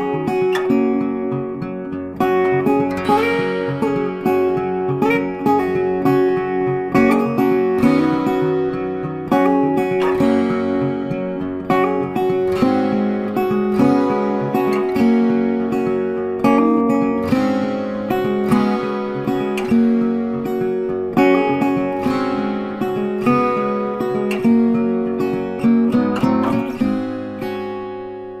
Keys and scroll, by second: 12.9 ctrl+t.